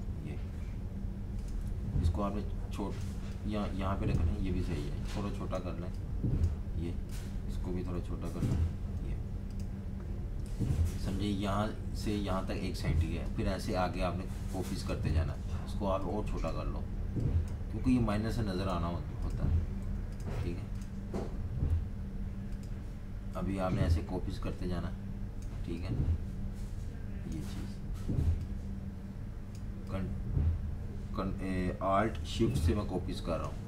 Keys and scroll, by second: 0.0-0.4 typing, 8.3-9.1 typing, 15.1 super+z, 19.8-20.6 typing.